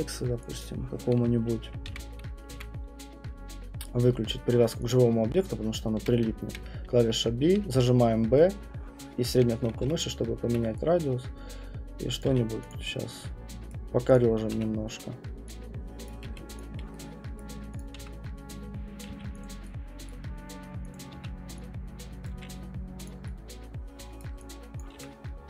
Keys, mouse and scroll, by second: 0.6 click, 1.9-3.1 typing, 4.9 click, 6.0-10.4 typing, 7.2 middle click, 9.3 middle click, 12.2 click, 12.3 q, 12.7 click, 13.7 right click, 14.1 click, 14.5 w, 16.0 click, 16.0 middle click, 16.2 q, 16.6 click, 17.4 middle click, 17.8 click, 18.0 w, 19.0 click, 19.1 q, 19.4 click, 19.4 right click, 20.0 right click, 20.9 click, 21.2 w, 22.2 click, 22.3 q, 23.1 click, 24.2 right click, 24.8 click, 24.9 w.